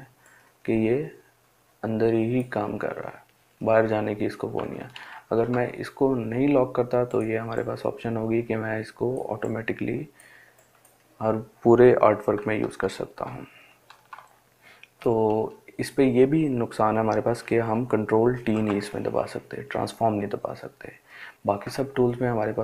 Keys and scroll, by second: 4.3 ctrl+alt+z, 12.2 ctrl+alt+z, 17.7 ctrl+t.